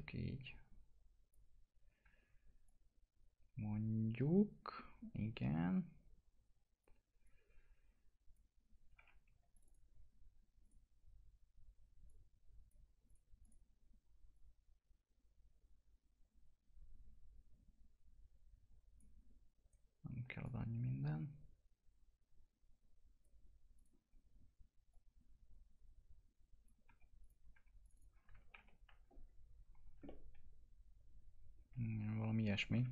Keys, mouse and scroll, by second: 1.8 w, 2.6 click, 7.2-9.2 drag, 9.2 2, 9.5 click, 13.0 click, 19.6 right click, 20.4-23.7 drag, 23.7 click, 24.0-24.9 scroll up 1, 24.9-26.8 drag, 26.8 2, 27.2 click, 27.5 2, 27.8 click, 28.5 ctrl+BackSpace, 29.8 scroll down 1, 30.0-32.9 alt+middle drag.